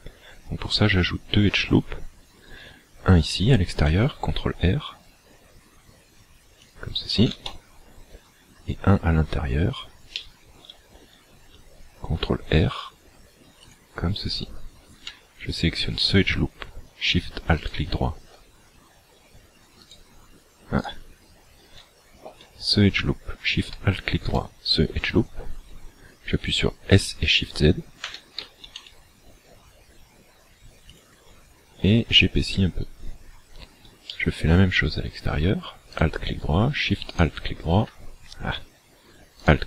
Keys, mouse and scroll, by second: 1.1 scroll up 1, 3.9 ctrl+r, 9.7-10.1 scroll up 2, 10.1 shift+middle click, 12.5 ctrl+r, 17.6 alt+shift+right click, 19.9 alt+right click, 20.9 alt+right click, 22.0 scroll up 3, 24.3 alt+shift+right click, 28.0 s, 30.9 shift+click, 34.1 shift+middle click, 36.0 alt+right click, 37.1 alt+shift+right click, 39.5 alt+right click.